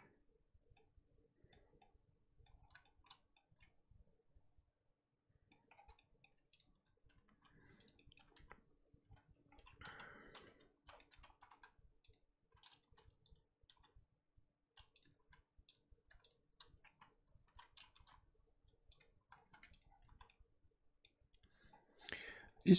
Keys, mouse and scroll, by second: 0.7-5.7 middle drag, 5.7 scroll down 3, 5.9-6.5 middle drag, 6.5 click, 7.2 alt+h, 7.8 click, 7.9-8.5 middle drag, 8.5 z, 9.0-9.5 scroll down 2, 9.5-9.9 scroll up 2, 9.9 KP_1, 10.4 Tab, 10.8 z, 10.9 shift+middle drag, 11.1 scroll up 1, 11.3 1, 12.1 click, 12.8 g, 13.6 g, 15.3 z, 15.7 click, 16.3 shift+click, 16.9 z, 17.4 ctrl+z, 17.9 g, 19.2 z, 19.3-20.1 scroll down 8, 19.5 Tab, 19.8 click, 20.2 z, 20.2-21.1 middle drag, 21.1-22.4 scroll up 2.